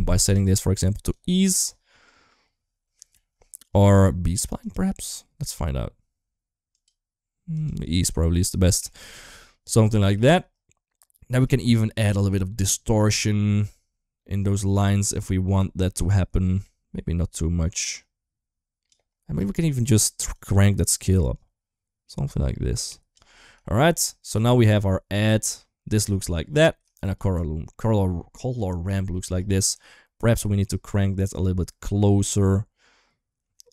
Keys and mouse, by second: 0.2-0.9 drag, 3.0 ctrl+s, 3.7-4.5 drag, 6.5-7.4 drag, 8.8 shift+middle click, 10.0 shift+middle click, 11.3 middle drag, 13.1-18.7 drag, 20.2-22.9 drag, 23.4 shift+middle click, 24.3 ctrl+shift+click, 26.8 ctrl+shift+click, 30.0-33.6 drag.